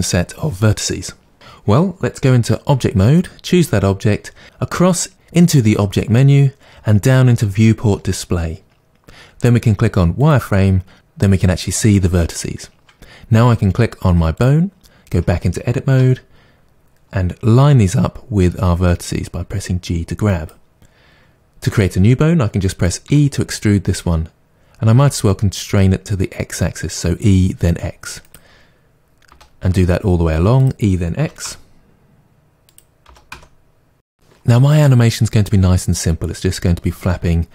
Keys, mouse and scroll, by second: 2.7 Tab, 3.1 click, 10.2 click, 14.3-15.9 drag, 15.9 Tab, 17.6 g, 20.4 click, 23.1 e, 28.3 click, 29.3 e, 30.6 click, 31.2 e, 32.1 click, 32.2 e, 32.6 click, 32.8 e, 33.3 e, 33.7 click.